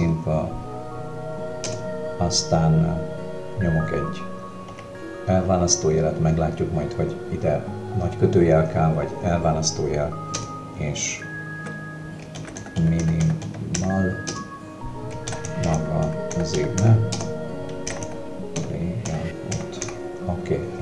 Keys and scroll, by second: 1.7 space, 4.7 -, 10.4 space, 12.4-13.8 typing, 15.7-19.8 typing.